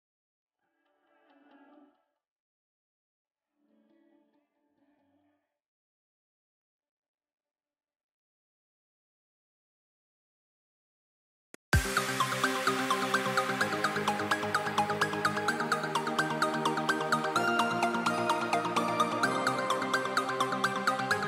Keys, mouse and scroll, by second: 10.9-11.3 scroll down 3, 11.3-12.2 scroll up 2, 12.2-13.5 middle drag, 13.5 z, 14.5-15.6 middle drag, 15.6 g, 16.8 click, 19.7 s.